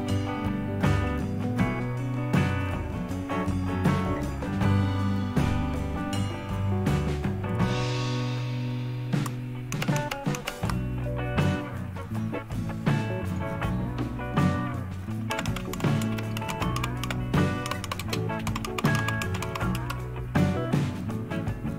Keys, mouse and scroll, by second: 2.5 click, 5.0 click, 9.6 ctrl++, 9.9 ctrl++, 10.2 ctrl++, 15.0-19.8 typing.